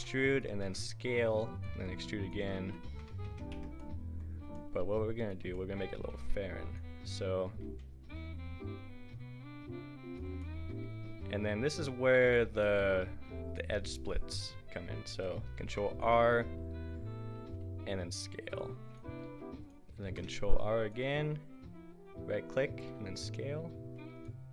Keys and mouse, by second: 0.6 s, 1.8 e, 2.6 ctrl+z, 2.9 ctrl+z, 3.1 ctrl+z, 3.5 Tab, 4.8 Tab, 5.2 click, 6.0 g, 6.5 click, 7.6 s, 10.9 click, 12.6 s, 15.6 ctrl+r, 17.4 s, 19.2 s, 20.1 ctrl+r, 22.9 s.